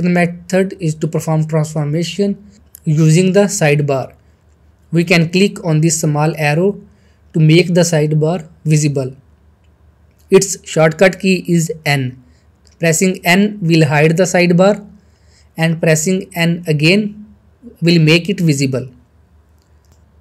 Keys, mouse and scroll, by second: 0.5 scroll down 1, 0.7 middle click, 1.1 shift+middle click, 1.7 click, 2.5 middle click, 2.9 scroll up 1, 3.0 shift+middle click, 6.7 middle click, 6.8 click, 11.6 click, 13.6 n, 17.0 n.